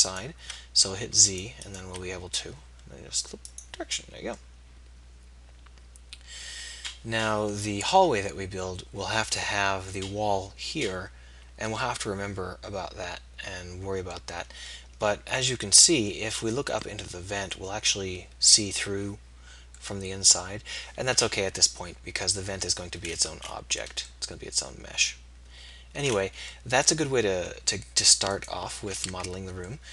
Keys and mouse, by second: 0.8 z, 4.1 z, 5.4 middle click, 8.6 middle click, 9.6 middle click, 12.2 middle click, 13.0 middle click, 14.0-15.3 middle drag, 17.7-20.0 middle drag, 20.7-22.1 middle drag, 24.0 middle click, 28.5-29.9 drag, 29.0 Tab.